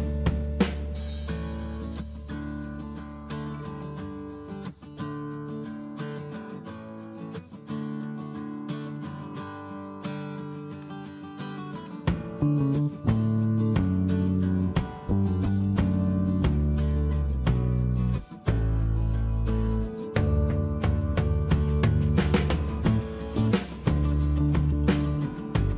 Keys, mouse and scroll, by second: 0.6 shift+space, 1.0 e, 5.0-6.9 typing, 13.9-14.8 typing, 16.0 space, 21.5 shift+space, 25.0 shift+m.